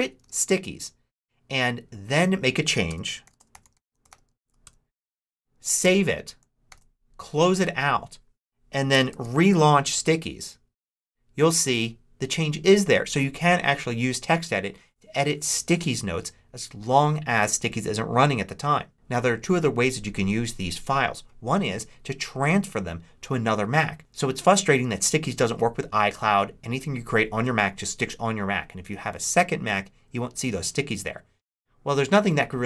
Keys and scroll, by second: 0.1 super+q, 2.8 Return, 2.9-4.8 typing, 5.5 Return, 5.7 super+s, 6.6 super+w, 9.0 super+s, 9.7 Return.